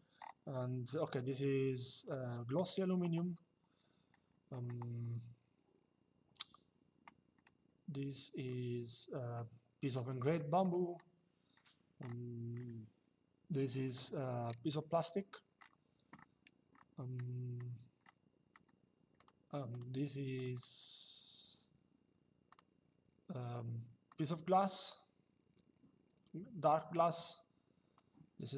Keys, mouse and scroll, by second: 0.7 click, 9.1 click, 10.0 middle click, 13.6 click, 18.9 click, 22.2 click, 23.8 click, 27.6 click.